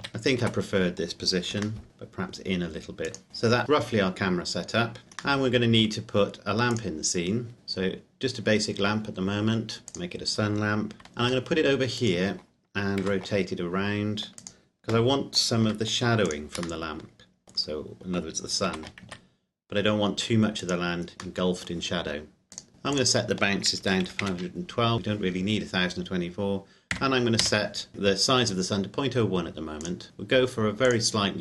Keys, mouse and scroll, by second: 0.0 ctrl+z, 1.5 g, 1.8 middle click, 3.1 click, 5.6 middle click, 6.1 scroll down 1, 6.9 click, 7.5 shift+a, 9.9 click, 11.1 g, 11.9 click, 13.1 r, 14.4 click, 15.6 g, 16.3 click, 16.8 middle click, 17.5-18.7 scroll down 1, 18.7 r, 19.1 z, 20.6 click, 21.4 middle click, 22.5 click, 23.8 KP_5, 24.0 KP_1, 24.1 KP_2, 24.2 KP_Enter, 24.9 click, 26.9 KP_Decimal, 27.5 KP_0, 27.9 KP_Enter, 29.8 click.